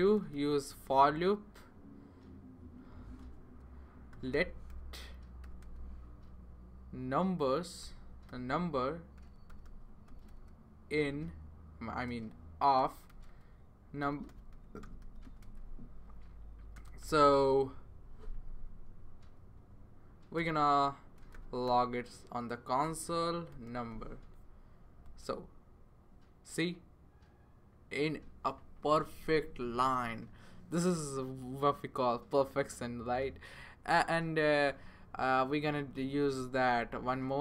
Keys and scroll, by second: 0.0-0.5 typing, 2.9-5.9 typing, 7.6-15.7 typing, 16.7-17.5 typing, 18.3 Right, 18.8 Right, 19.5 Left, 20.4 Return, 21.2-24.4 typing, 36.6 Return, 37.1 Return.